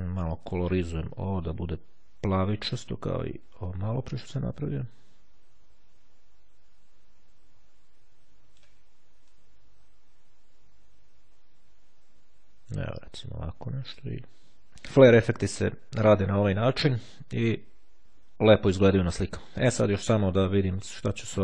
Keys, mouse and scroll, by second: 0.6 click, 1.7-4.5 drag, 4.8-9.2 drag, 9.3-12.8 drag, 13.9 click, 20.3 click.